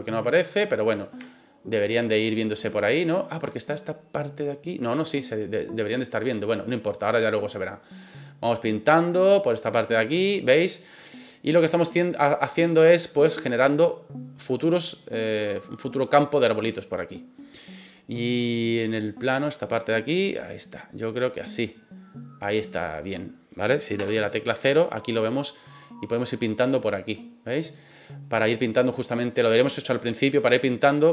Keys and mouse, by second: 1.2-1.8 shift+middle drag, 21.7-23.0 middle drag, 24.0 KP_0.